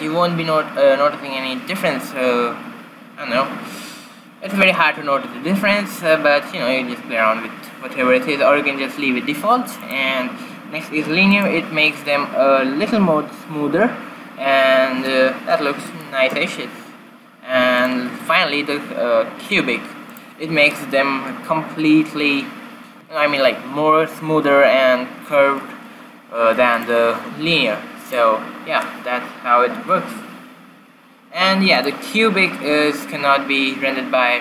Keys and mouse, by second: 10.1-12.0 drag, 16.2-18.3 middle drag, 18.3-20.1 drag, 27.0-30.3 drag, 32.1-33.9 drag.